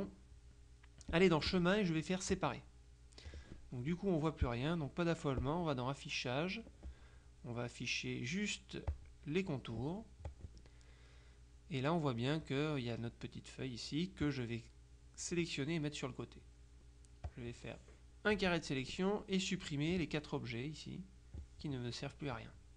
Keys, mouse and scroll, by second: 1.2 click, 2.4 click, 5.5 click, 9.0 click, 10.4 click, 12.5 click, 14.3-17.0 drag, 17.3-18.9 drag.